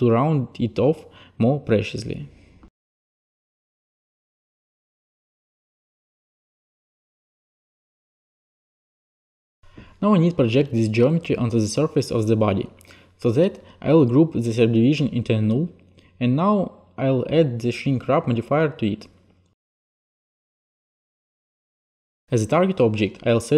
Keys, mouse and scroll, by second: 0.4 t, 2.0 click, 2.5 click, 3.7 click, 4.5 t, 5.8 click, 6.2 e, 7.6 click, 7.8 ctrl+a, 9.0 click, 9.7 click, 11.4 alt+click, 13.5 click, 14.1 click, 15.4 alt+g, 16.2 click, 18.5 click, 22.0 click, 23.4 click.